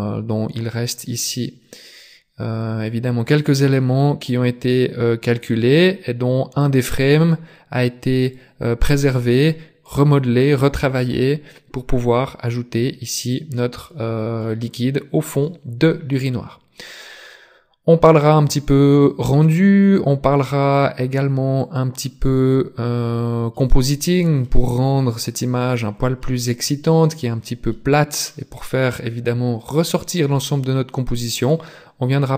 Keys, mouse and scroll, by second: 1.6-2.0 scroll up 2, 3.0 click, 8.2 click, 9.4 middle click, 13.4-13.8 scroll down 2, 13.8 middle click, 14.7 scroll down 1, 14.8 scroll up 1, 15.4 middle click, 19.2 click.